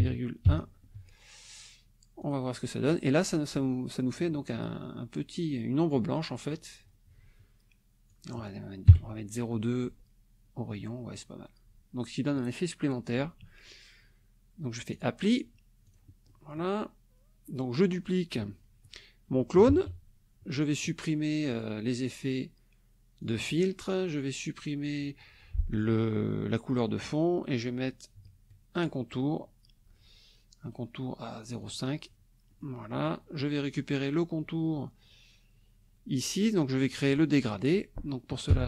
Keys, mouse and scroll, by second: 0.0-0.4 typing, 0.9 Tab, 2.2 click, 8.1 click, 8.9 KP_2, 9.8 Tab, 14.9 click, 15.8 click, 16.3 click, 16.7-18.4 middle drag, 19.7 ctrl+d, 21.5 click, 23.2 click, 26.7 click, 28.7 shift+click, 30.6 right click, 31.6 click, 32.5 click, 32.9 middle click, 33.4 click, 38.5 F7.